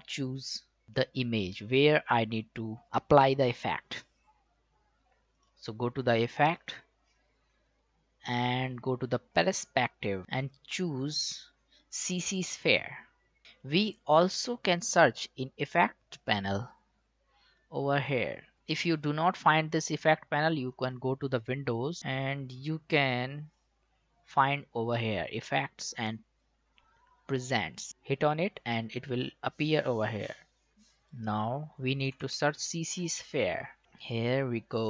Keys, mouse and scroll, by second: 5.4 click, 13.6 click, 20.7 click, 29.9 click, 32.1-33.8 typing.